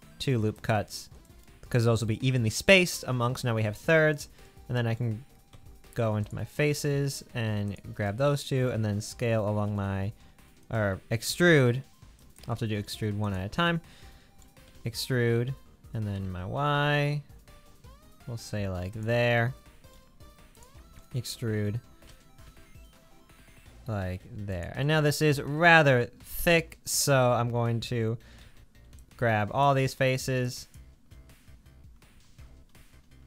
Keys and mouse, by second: 5.5 3, 7.6 shift+click, 9.2 s, 11.3 e, 13.2 click, 14.6 e, 20.6 click, 22.1 e, 28.5 alt+z, 29.0 click, 30.1 shift+click, 32.2 alt+click, 32.3 alt+z.